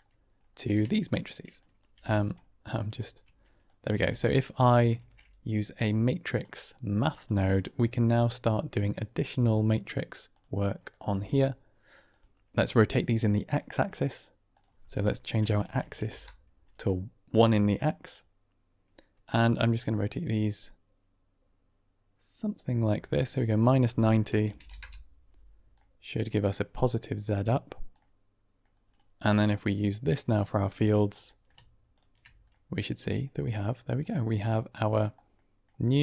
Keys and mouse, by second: 1.6 click, 1.8 g, 2.9 ctrl+right click, 3.7 click, 3.9 g, 4.9 shift+a, 8.4 click, 10.2 click, 11.0 g, 13.8 click, 14.5-16.6 drag, 15.7 Tab, 19.7-23.2 drag, 23.4-25.2 drag, 25.7-26.0 middle drag, 27.9 middle click, 29.5-30.8 drag, 31.3 click, 32.4-33.6 drag, 34.3-35.2 middle drag, 35.4 middle click.